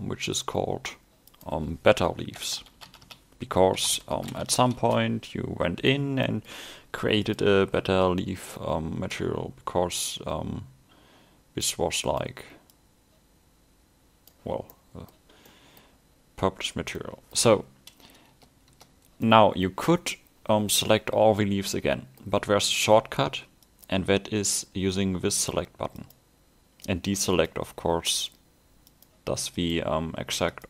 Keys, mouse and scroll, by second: 2.8 t, 6.3 middle click, 7.2 click, 14.8 middle click, 16.8 scroll up 1, 17.0 middle click, 19.2 middle click, 21.8 middle click, 23.7-30.6 click.